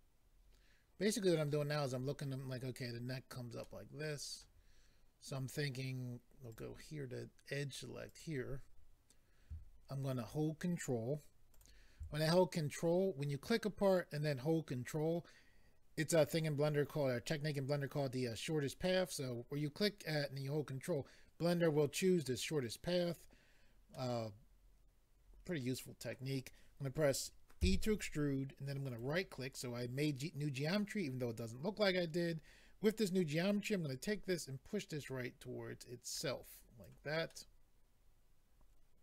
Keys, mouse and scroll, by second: 3.6 middle click, 6.5 click, 8.1 click, 11.5 ctrl+click, 23.9 middle click, 27.6 e, 28.9 right click, 33.9 click, 37.3 middle click.